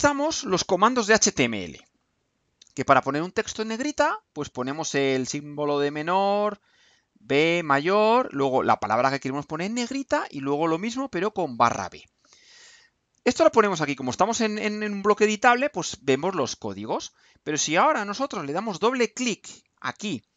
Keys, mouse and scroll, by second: 19.2 click.